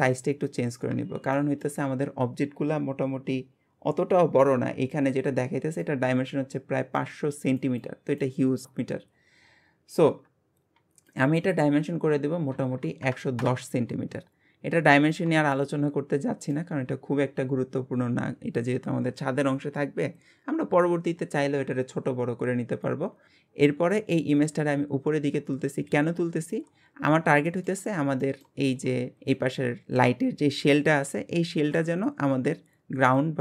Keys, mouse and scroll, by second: 1.3-4.5 shift+middle drag, 11.1-12.7 drag, 12.7 KP_1, 14.5 scroll up 1, 15.5-18.6 shift+middle drag, 23.3-23.9 scroll up 2, 23.9 click, 27.5 shift+middle click, 27.8-28.2 scroll up 1, 28.2-28.6 shift+middle drag, 28.6-29.2 scroll up 1, 29.2 scroll up 1, 29.3-33.4 shift+middle drag.